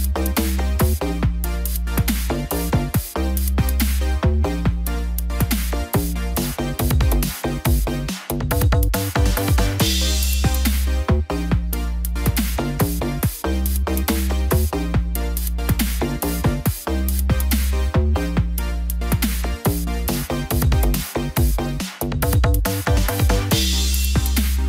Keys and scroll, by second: 19.0 ctrl+t.